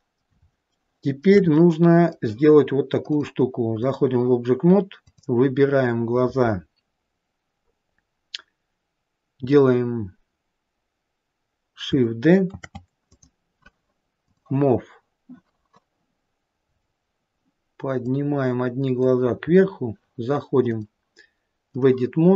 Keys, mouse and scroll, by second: 0.6 middle click, 1.0 shift+middle click, 1.9 middle click, 3.4 click, 5.3 click, 12.8 shift+d, 14.5 click, 16.9-17.5 scroll down 1, 17.5-18.4 scroll down 3, 18.4 click, 19.8-20.9 scroll up 4, 20.9 click.